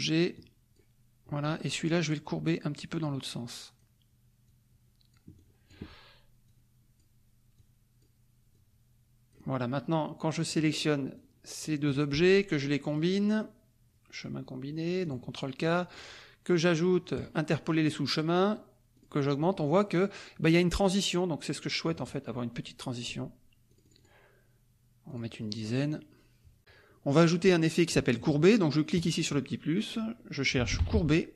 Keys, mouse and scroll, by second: 0.3 click, 1.7 click, 3.2 click, 4.4 click, 5.3 click, 6.4 click, 7.5 click, 8.5 click, 10.5 click, 11.1 click, 12.9 click, 15.1 click, 15.9 click, 17.2 click, 18.9 click, 23.6 click, 25.0 click, 28.9 click, 30.3-31.3 typing.